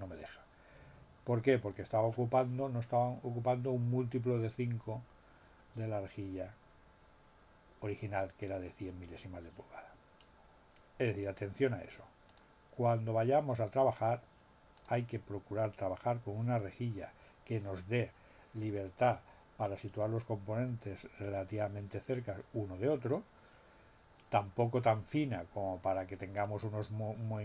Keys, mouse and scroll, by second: 12.2 click, 14.8 click, 24.7 click, 26.3 click.